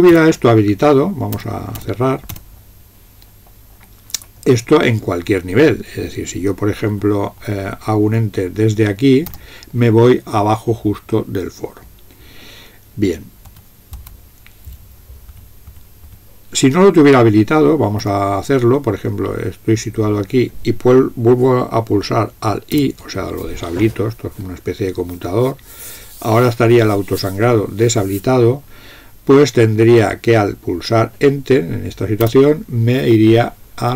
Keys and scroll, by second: 1.5-2.3 typing, 6.9 Up, 9.3 Return, 13.6 BackSpace, 14.0 BackSpace, 15.3 Down, 15.7 Down, 16.1 Down, 18.1 Up, 22.8 alt+i, 32.3 Return.